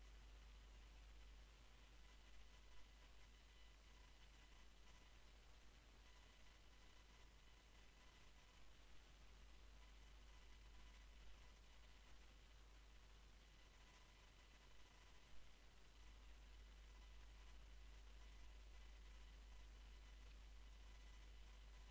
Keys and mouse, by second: 1.3-3.7 drag, 3.7 KP_1, 6.4-9.5 middle drag, 6.6 e, 11.6-15.9 middle drag.